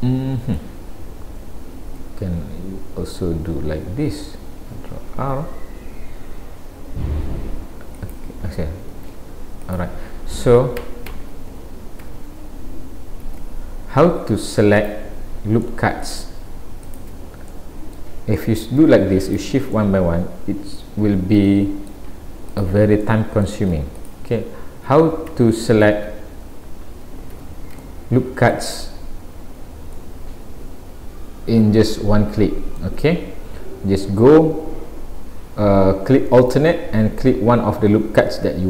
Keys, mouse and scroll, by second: 5.1 ctrl+r, 10.3 a, 12.1 a, 13.3 alt+a, 13.8-14.2 scroll up 2, 14.8 click, 15.6 middle click, 16.9 shift+click, 17.5 middle click, 18.4 middle click, 19.3 shift+click, 19.8 middle click, 21.5 shift+middle click, 22.5 click, 23.1 middle click, 24.0 shift+click, 24.9 a, 27.3 alt+a, 27.8 shift+middle click, 30.0 middle click.